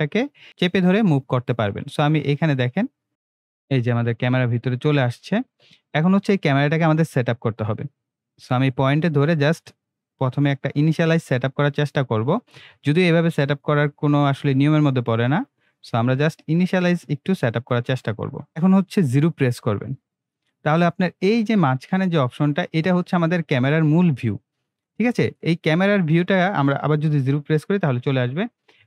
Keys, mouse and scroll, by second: 0.5 scroll down 1, 0.6 scroll up 1, 0.9 scroll down 1, 1.7 scroll up 1, 3.1-3.6 shift+middle drag, 4.2-4.6 scroll down 1, 4.6 scroll up 1, 6.0-6.9 middle drag, 7.7-9.9 drag, 10.0 scroll down 1, 10.4 scroll up 1, 11.3-13.1 middle drag, 13.2 scroll up 1, 13.6 scroll down 1, 14.8 scroll up 1, 16.2-17.0 shift+middle drag, 21.8-22.4 scroll down 1, 22.5 scroll up 1, 24.8-26.1 middle drag.